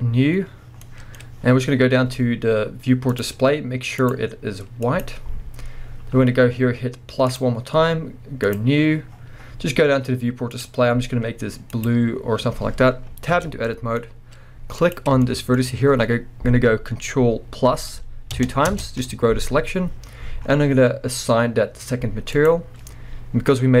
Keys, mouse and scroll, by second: 0.8 scroll down 2, 0.8-3.1 middle drag, 1.2-1.7 scroll up 2, 1.7-3.1 scroll down 2, 3.1-4.2 drag, 3.4 scroll down 2, 5.8-7.3 scroll up 1, 7.3-10.6 drag, 9.1-10.5 scroll down 1, 13.3 Tab, 13.6-14.8 middle drag, 14.0-14.8 scroll up 2, 14.8 click, 15.7-18.4 scroll up 1, 18.4 ctrl+KP_Add, 20.1-22.3 scroll up 1, 22.3-23.8 drag.